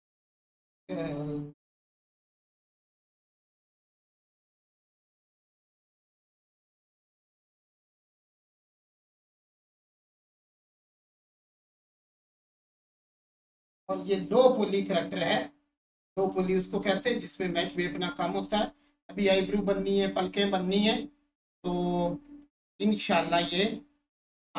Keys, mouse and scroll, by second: 1.1-3.1 alt+drag, 3.1 3, 6.5 click, 9.7 click, 12.2 1, 13.7 click, 16.3-20.7 alt+drag, 22.4-24.5 drag.